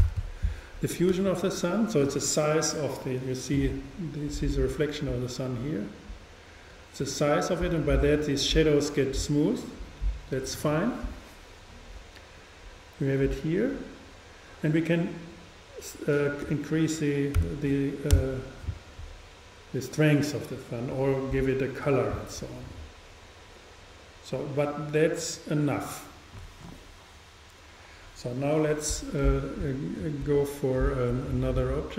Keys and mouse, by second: 30.3 shift+a.